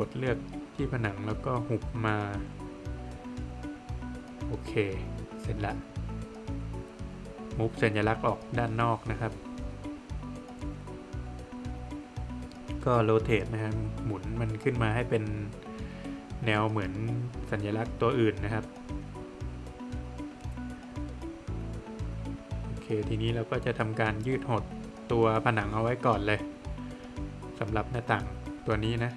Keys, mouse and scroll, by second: 1.9 click, 4.0 Escape, 4.8 scroll down 1, 5.0 middle click, 5.6 click, 5.8 double click, 6.1 scroll down 1, 6.2 middle click, 6.6 scroll down 1, 8.2 space, 9.9 click, 11.2 click, 11.3 Escape, 11.7 click, 12.1 double click, 13.3 click, 14.9 click, 15.4 Escape, 15.8 scroll down 1, 16.0 middle click, 16.8 middle click, 17.2-17.8 scroll up 1, 17.8 Escape, 18.0 scroll up 1, 19.5 Escape, 20.5 space, 21.1 click, 21.5 double click, 22.1 shift+click, 23.8 middle click, 24.3 space, 24.6 click, 26.4 typing, 26.9 scroll down 1, 27.0 middle click, 27.5 Escape, 28.5 click.